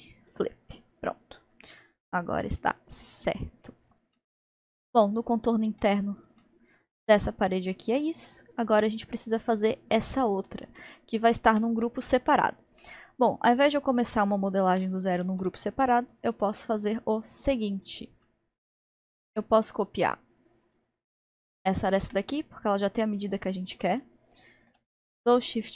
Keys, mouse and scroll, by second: 0.0 alt+n, 1.3-1.7 scroll down 1, 1.7-3.2 middle drag, 3.2 click, 3.7-4.1 scroll down 1, 4.2-9.3 middle drag, 9.3-9.7 scroll down 3, 9.7-12.3 middle drag, 11.8 scroll, 11.8-12.5 scroll up 3, 12.8-14.8 middle drag, 14.8 scroll, 14.8-15.4 scroll down 1, 15.4-20.7 middle drag, 20.7 click, 21.2-24.6 middle drag, 24.6 shift+d.